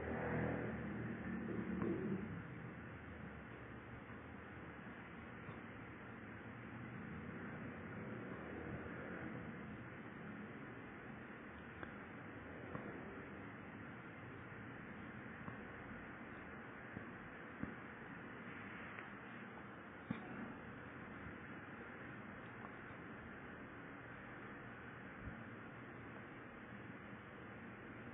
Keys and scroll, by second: 1.8 Return, 4.8 =, 8.5 *, 10.9 Return, 14.3-15.3 typing, 16.2 Down.